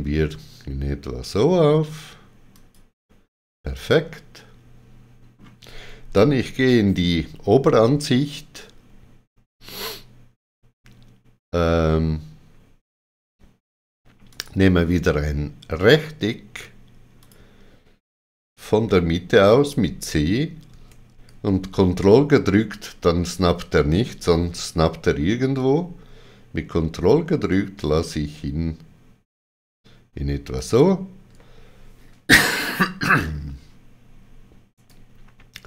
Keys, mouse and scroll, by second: 2.5 click, 3.9 middle click, 14.3 click, 17.2 click, 19.4 c, 26.1 ctrl+c, 26.1 click, 30.5 ctrl+click, 34.7 right click.